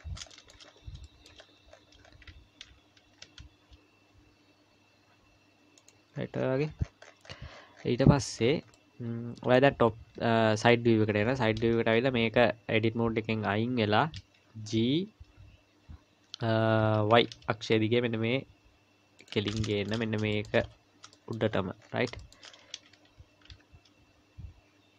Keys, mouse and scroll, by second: 0.0-2.0 scroll up 12, 0.3 shift+middle click, 1.0 shift+middle click, 3.0 scroll up 3, 3.0 g, 6.2-8.7 scroll down 50, 8.7 middle click, 9.7 KP_1, 10.6 KP_3, 11.2-11.7 scroll up 4, 11.8 Tab, 14.6 g, 19.7 shift+middle click, 20.0-23.1 scroll up 15, 20.3 shift+middle click, 21.1 shift+middle click, 22.2 shift+middle click, 23.3 g.